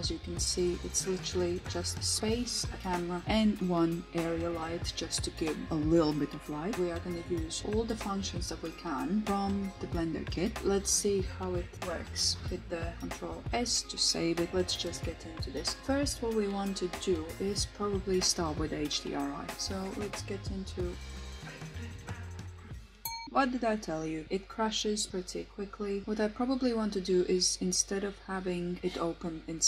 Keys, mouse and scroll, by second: 0.7-6.8 middle drag, 8.4 ctrl+s, 16.2 click, 20.3 click.